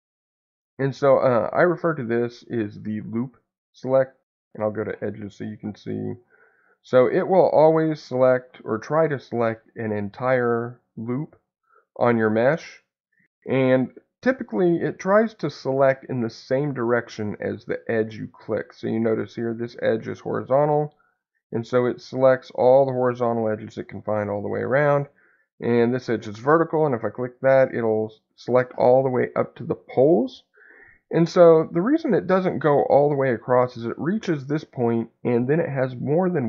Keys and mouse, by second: 9.4 alt+click, 10.5-11.7 middle drag, 20.9 alt+click, 22.1 middle click, 23.9 middle click, 26.4 alt+click, 27.3 middle click, 32.3 middle click, 33.5 middle click.